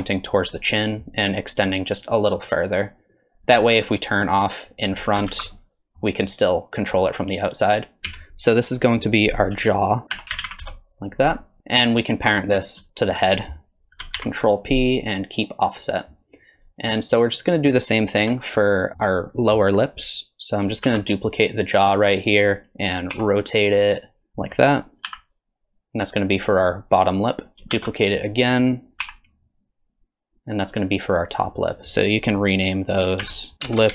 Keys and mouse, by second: 1.8-3.6 shift+drag, 4.6 click, 5.3 alt+z, 5.5 middle click, 7.0 middle click, 8.1 KP_3, 10.1 F2, 12.9 shift+click, 14.2 ctrl+p, 16.6 click, 18.2 KP_3, 18.9 shift+click, 20.9 shift+d, 23.1 r, 25.1 s, 27.7 shift+d, 29.0 r, 31.5 click, 33.2 F2.